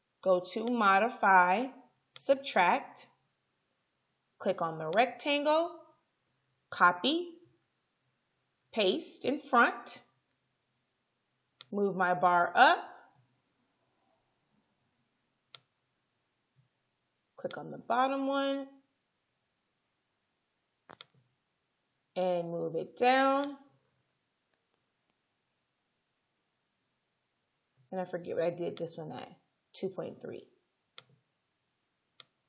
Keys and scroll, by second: 7.5 ctrl+c, 9.9 ctrl+f, 19.3 ctrl+z.